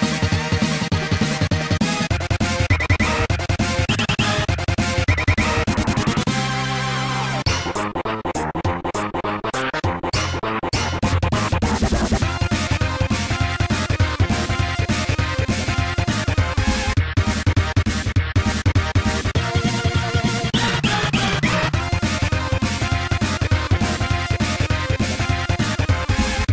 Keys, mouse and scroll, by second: 4.2 click, 6.2 click, 6.3 click, 7.0 click, 7.1 click, 7.6 right click, 7.9 g, 9.0-9.3 scroll down 2, 10.8 right click, 11.0 g, 11.8 scroll down 2, 13.0 click, 13.7 right click, 14.1 g, 16.0 click, 17.1 right click, 17.3 g, 19.9-20.3 scroll up 2, 22.0 click, 23.8 Tab, 24.5 click, 25.1 ctrl+s, 25.4 click, 25.6 a.